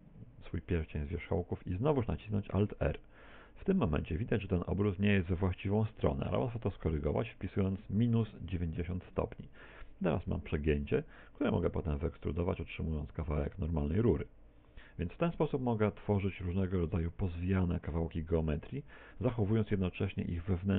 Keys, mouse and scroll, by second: 2.6 alt+r, 7.4 click, 12.0 e, 14.6 ctrl+click, 14.6 z, 15.1 middle click, 16.4 middle click.